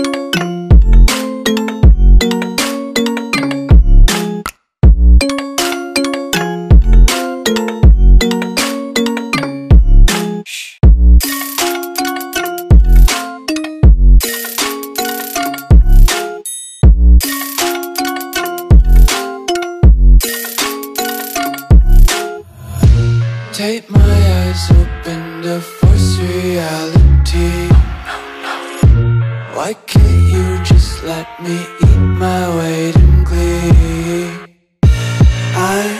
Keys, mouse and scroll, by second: 0.7 ctrl+click, 3.1 ctrl+click, 4.4 click, 8.7 Return, 12.5 alt+Num_Lock, 12.5 click, 15.0 Return, 19.7 alt+click, 21.6 Return, 26.6 Return, 29.3-30.8 scroll down 1, 30.8 click, 32.2-33.2 scroll up 1, 33.2 click.